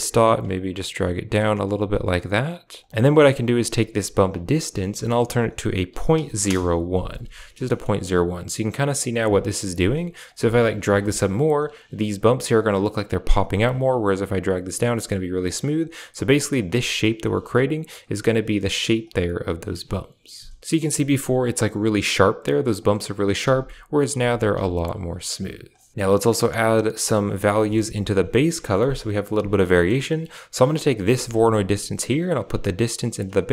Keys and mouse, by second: 0.4 click, 2.8 middle click, 4.4 click, 7.6 shift+middle click, 8.6 click, 9.2 click, 9.8 click, 10.2 click, 10.9 shift+middle click, 13.4 click, 13.9 click, 15.3 click, 15.7 click, 19.7 click, 20.6 m, 23.1 click, 23.3-25.9 typing, 24.9 click, 27.5 middle click, 27.8 a, 29.6 middle click, 30.5 click, 31.0 g, 32.4-33.5 drag.